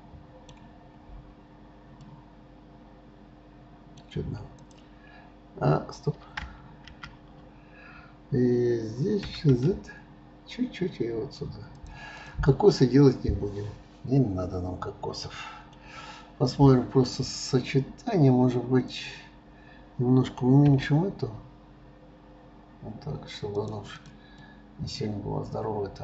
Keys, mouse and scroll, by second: 0.8-1.8 scroll up 4, 1.8 scroll up 1, 2.0-4.7 middle drag, 4.7 click, 12.1 click, 12.7-15.9 middle drag, 15.9-18.8 scroll down 3, 18.8 click, 24.0 drag, 24.4-26.0 middle drag.